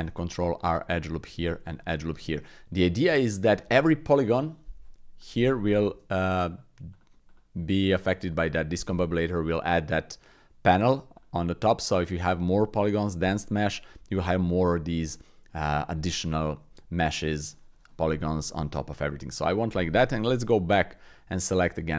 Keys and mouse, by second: 1.2 ctrl+r, 5.2 click, 5.9 Tab, 6.5 click, 6.9 click, 7.3-8.9 drag, 11.1 click, 15.1 click, 16.1 click, 16.9 shift+click, 19.4 click, 20.0 KP_1, 21.7 alt+z.